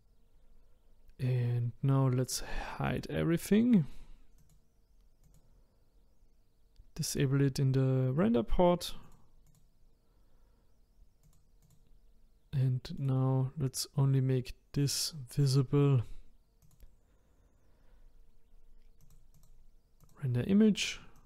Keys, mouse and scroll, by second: 2.3 click, 2.9 click, 4.4 click, 5.3 click, 9.1 click, 9.5 click, 11.3 click, 11.6 click, 13.0 click, 14.8 click, 16.6 click, 19.0-21.2 drag.